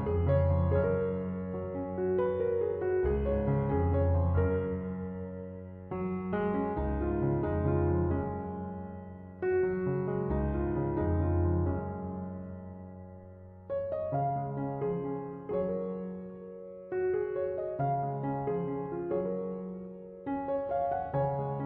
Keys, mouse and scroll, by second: 12.9 1, 13.1 0, 13.3 Return.